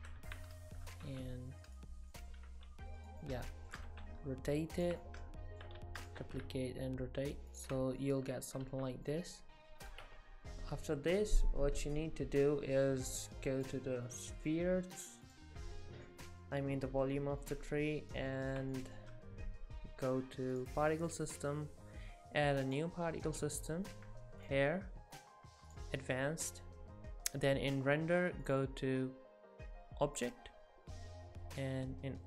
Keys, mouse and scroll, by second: 1.0 r, 2.1 middle click, 2.5 r, 3.2 middle click, 3.9 r, 5.0 middle click, 5.8 shift+d, 6.2 r, 7.8-8.1 scroll down 4, 8.0 middle click, 8.7 alt+a, 9.1 middle click, 10.0 Tab, 13.6 click, 14.1 click, 17.4 middle click, 18.7 shift+middle click, 20.6 click, 22.7 click, 25.7 click, 26.2-28.5 scroll down 8, 28.5 click, 28.5 scroll down 1.